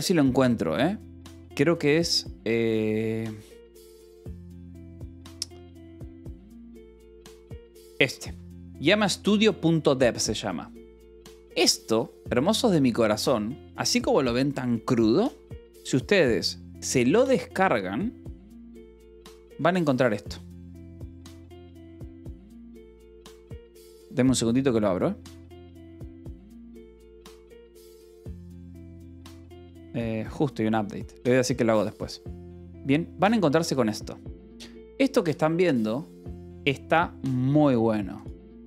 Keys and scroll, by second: 20.0-22.6 typing, 23.8 Return.